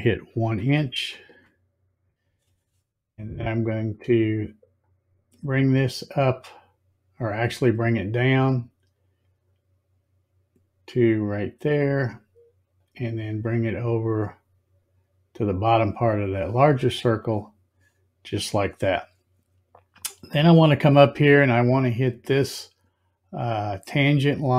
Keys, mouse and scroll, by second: 4.8-11.1 drag, 12.8 click, 16.1 click.